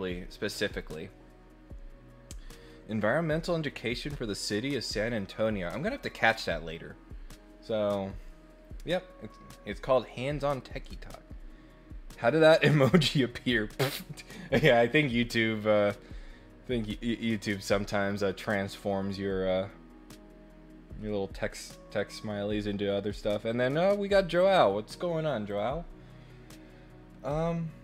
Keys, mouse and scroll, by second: 24.3 click, 25.4 click, 27.2-27.8 middle drag.